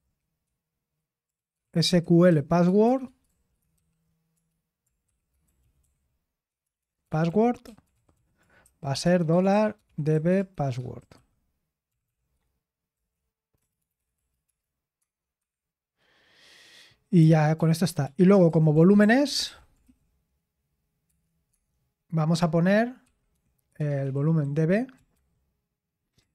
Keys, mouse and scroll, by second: 1.6 Escape, 3.3-8.6 typing.